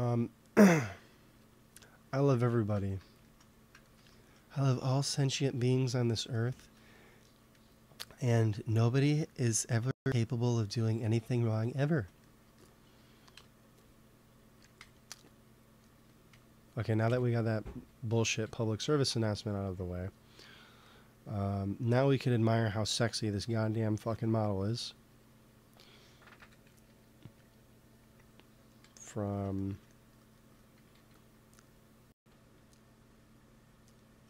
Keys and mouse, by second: 1.2 KP_1, 9.5-11.5 drag, 13.2 KP_1, 14.7 n, 15.2-17.0 drag, 16.2 n, 17.0 n, 18.0 t, 18.3 ctrl+s, 21.7-23.2 middle drag, 24.0 KP_1, 26.3 KP_1, 26.8 KP_3, 30.6 g, 30.9 f, 31.5 click, 32.1 f.